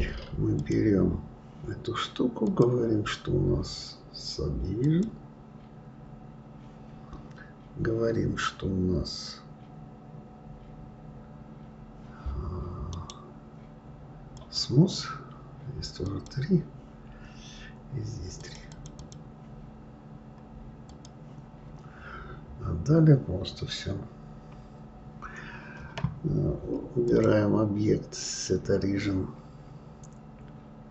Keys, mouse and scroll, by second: 0.6 click, 2.4-5.5 drag, 12.9-15.9 right drag, 16.1 click, 18.4 click, 20.9 click, 21.5-22.1 scroll down 4, 27.0-30.1 drag.